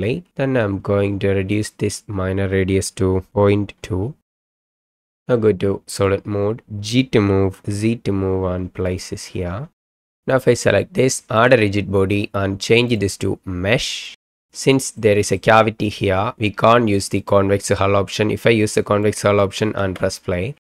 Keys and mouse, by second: 1.5-4.4 right drag, 4.7 right click, 4.9 middle drag, 7.2 g, 7.7 z, 8.9 click, 10.0 click, 11.4 click, 12.9-14.1 drag, 15.0-15.5 middle drag, 17.2-19.1 drag, 19.8 space.